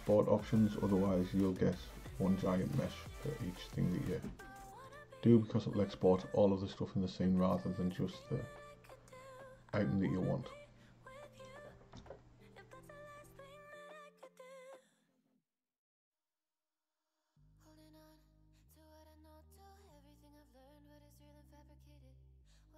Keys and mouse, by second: 4.9 click, 8.2-11.3 drag, 15.8 click, 17.3-20.3 drag.